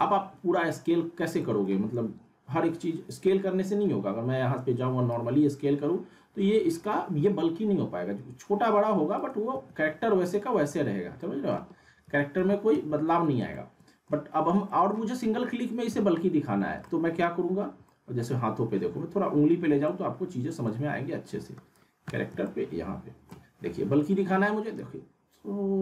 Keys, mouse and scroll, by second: 4.4 r, 5.1-9.1 drag, 9.5 ctrl+a, 11.2 middle click, 11.2 middle click, 12.0 ctrl+z, 13.5-14.2 alt+middle click, 14.3 scroll up 1, 14.7 alt+middle click, 14.7 alt+middle click, 15.0-15.9 typing, 16.5 scroll up 1, 16.8 alt+middle click, 17.3-17.7 scroll up 1, 17.8-18.5 alt+middle drag, 19.3-19.8 scroll up 1, 19.8 middle click, 19.9-20.8 middle click, 21.0-22.0 scroll down 1, 22.4-23.0 ctrl+alt+middle drag, 24.8-25.8 click.